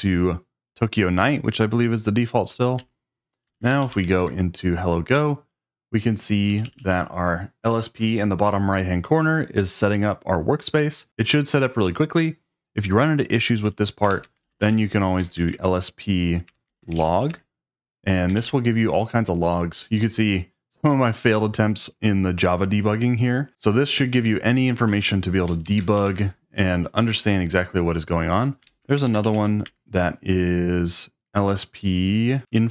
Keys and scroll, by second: 2.8 q, 3.5 shift+g, 4.2 shift+Return, 6.4 j, 6.6 j, 6.7 j, 13.9-15.3 typing, 16.5-18.9 typing, 25.4-26.4 typing, 28.4-29.8 typing, 32.4 Return.